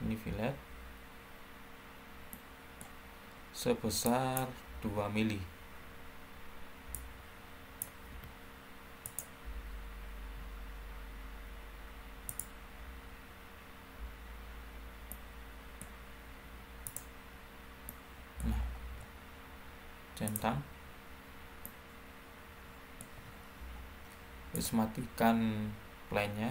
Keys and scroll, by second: 4.8 2, 8.0 2.